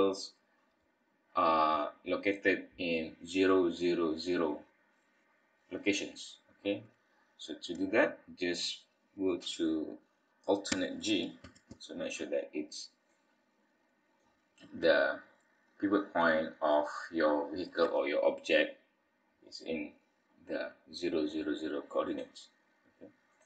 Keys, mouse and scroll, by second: 11.4 alt+g, 13.1 middle click, 14.4-16.1 scroll up 2, 16.1-16.7 scroll down 4, 16.7 middle click, 22.0 click, 23.3 click.